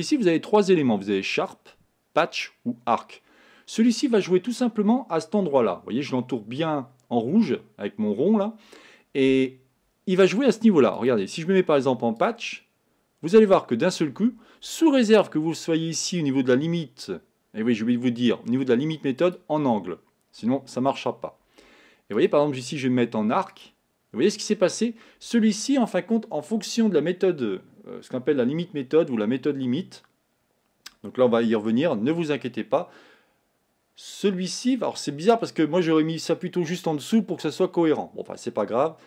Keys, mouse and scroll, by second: 12.5-19.6 drag, 23.7-39.0 drag.